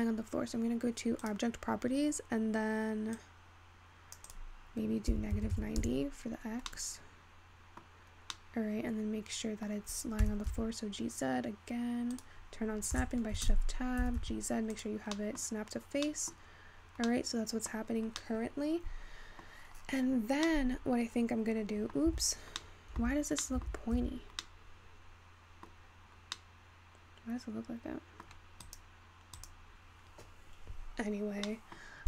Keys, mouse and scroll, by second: 1.3 click, 3.2-6.4 drag, 6.4-6.7 scroll up 4, 6.7-11.3 middle drag, 11.3 g, 13.5 shift+Tab, 14.3 g, 16.5-17.8 scroll up 7, 17.8-22.4 middle drag, 22.4 Tab, 23.5-29.8 middle drag, 29.8 click, 31.6-32.0 middle drag.